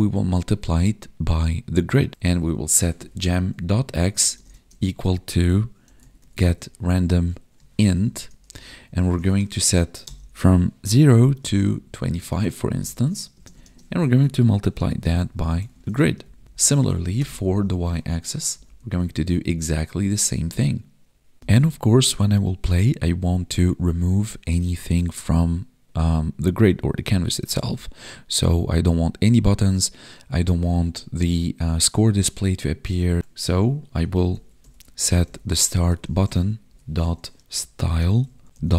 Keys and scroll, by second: 4.1 space, 4.5 space, 6.8 Tab, 12.6 Right, 13.3 space, 13.6 space, 15.7 ctrl+s, 16.2 Left, 16.8 Right, 18.4 ctrl+Right, 18.7 ctrl+s, 35.8 Tab.